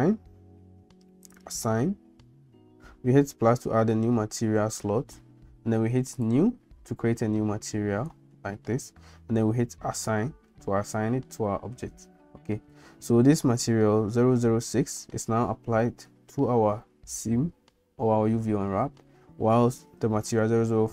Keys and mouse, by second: 1.3 click, 6.3 click, 10.1 click.